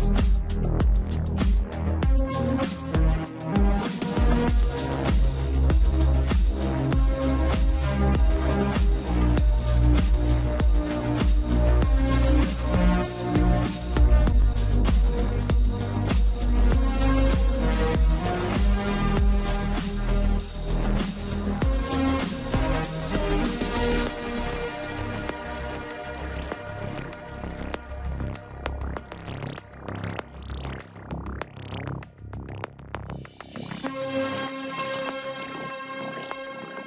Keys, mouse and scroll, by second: 2.1-5.2 drag, 7.0 click, 7.6-8.2 scroll down 1, 8.2-11.3 middle drag, 11.8-12.7 shift+middle drag, 12.7 scroll down 1, 13.7 KP_1, 14.6 scroll up 2, 15.4-15.9 scroll down 2, 15.9 click, 17.7 shift+a, 24.8-27.9 drag, 29.7-32.8 drag, 33.4 click, 34.1 click, 35.0-36.1 scroll up 2, 36.2 s.